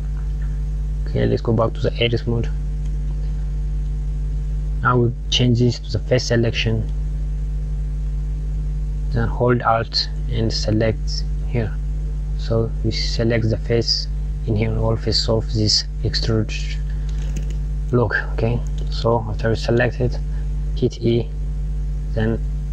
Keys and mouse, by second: 0.1 click, 1.0 Tab, 2.2 KP_Add, 3.7 click, 5.7 click, 7.4 click, 10.9 alt+click, 17.9 click, 20.5 e.